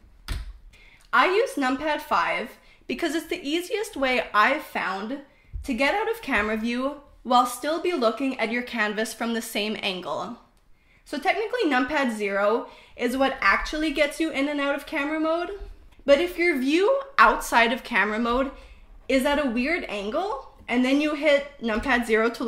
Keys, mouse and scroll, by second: 13.1 KP_0, 13.9 KP_0, 14.7 KP_0, 15.4 KP_0, 17.6 KP_0, 18.0-20.6 middle drag, 22.2 KP_0.